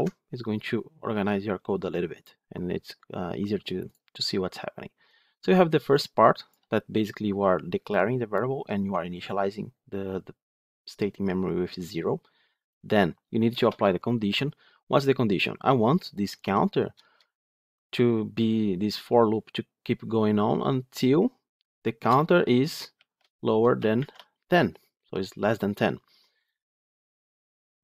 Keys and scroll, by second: 16.9 Return, 20.4 Return.